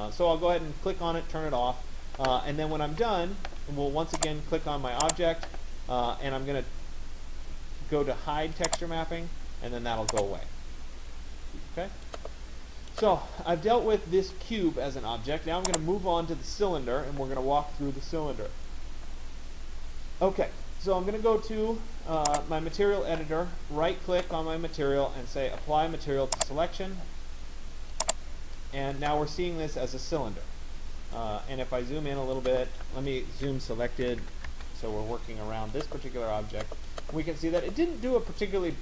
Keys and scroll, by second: 33.8 Return.